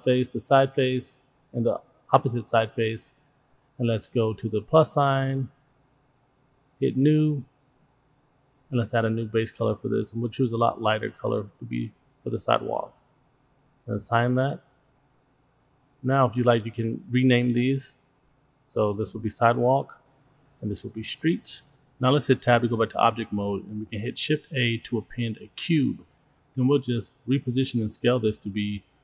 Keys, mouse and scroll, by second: 0.5 shift+click, 1.5 middle click, 2.8 shift+click, 5.9 click, 8.2 click, 9.1 click, 12.0 scroll down 1, 13.3 click, 14.8-15.5 scroll up 3, 16.5 click, 16.6-19.7 drag, 19.9 click, 20.0-21.5 drag, 20.9 e, 21.5 middle click, 21.7 Tab, 22.4 click, 23.0 shift+a, 26.8 middle drag, 27.0 click, 27.3 s, 28.4 click, 28.7-29.0 drag.